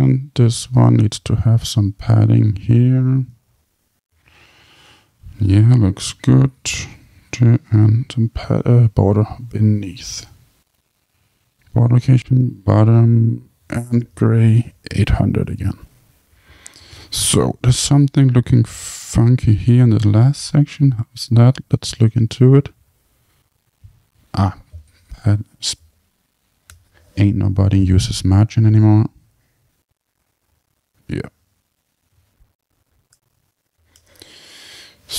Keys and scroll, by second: 3.4 Tab, 26.7 Tab, 33.1 Tab.